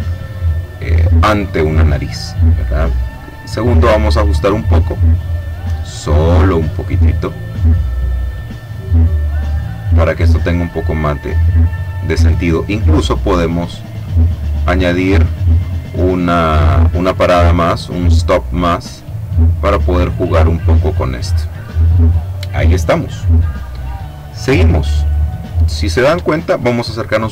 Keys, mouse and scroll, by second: 3.3 click, 4.5-8.1 drag, 8.6-12.4 drag, 14.0 click, 15.3 click, 16.9-21.7 drag, 24.8 click, 26.6-27.2 ctrl+scroll up 1.